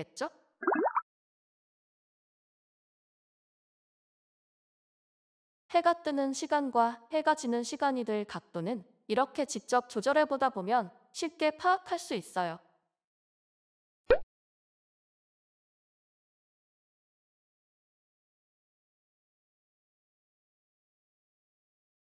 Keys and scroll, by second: 0.0-0.5 typing, 3.6 Left, 4.4 ctrl+s, 10.2 e, 10.5 Escape.